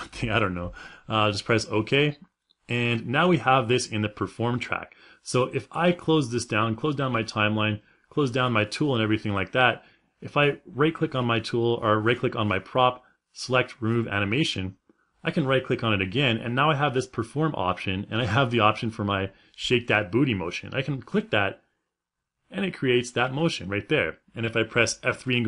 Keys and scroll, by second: 24.3 F3.